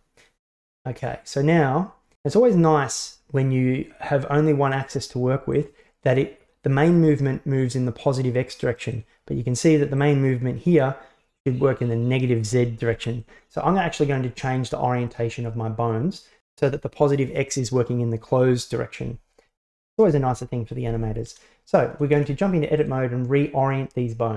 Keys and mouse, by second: 0.6-5.6 right drag, 5.6-9.0 drag, 10.1-13.2 drag, 20.4 shift+middle click, 22.2 Tab.